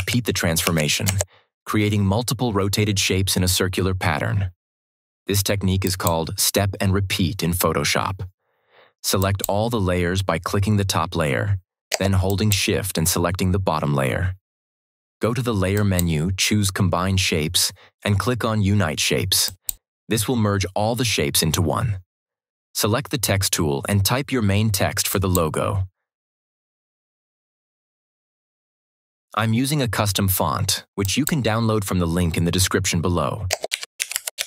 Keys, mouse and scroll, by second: 5.7 click, 8.7 click, 12.2 shift+click, 15.6 click, 19.3 click, 25.0 click, 30.9 click, 31.1 click, 33.4-34.4 typing.